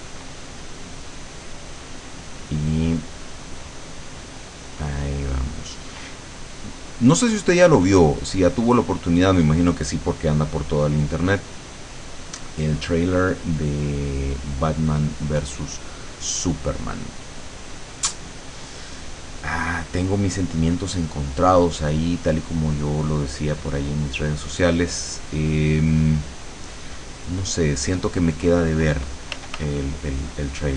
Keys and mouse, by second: 1.6 middle click, 3.2-17.5 drag, 19.2 click, 19.6-22.4 drag, 23.0-25.9 drag, 26.0 middle click, 27.1 middle click, 28.2 click, 29.4 f, 29.9-30.7 drag.